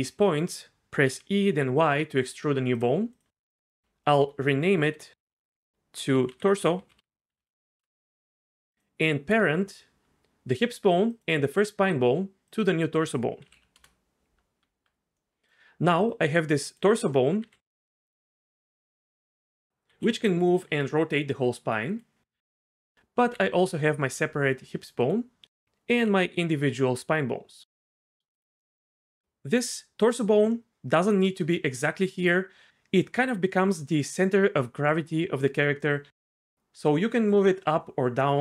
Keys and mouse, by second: 1.1 e, 1.5 y, 2.7 click, 3.8 F2, 4.2 F2, 8.7 click, 13.4 ctrl+p, 14.6 Tab, 16.7 click, 17.4 g, 18.0-18.6 right drag, 19.7 r, 19.9 g, 20.7 r, 22.9 r, 23.2 r, 25.6 click, 25.8 r, 26.6 r, 28.2 r, 32.1 Tab, 36.2 g, 36.4 z.